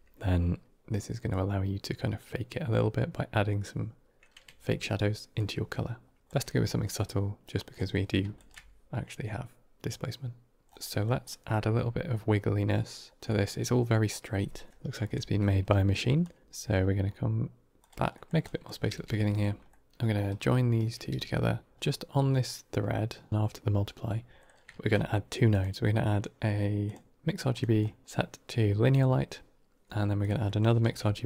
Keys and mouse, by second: 1.2-5.2 drag, 7.8 middle click, 8.2 ctrl+shift+click, 10.7 middle click, 11.2 middle click, 13.2 middle drag, 14.7 KP_7, 15.6 middle click, 16.1-16.4 drag, 16.4 g, 18.0 middle click, 18.3 drag, 19.6 middle click, 20.4 shift+right click, 21.0 g, 21.7-23.3 drag, 24.6 shift+a, 28.0-28.9 drag, 30.1 click, 30.3 middle click, 30.7 shift+d.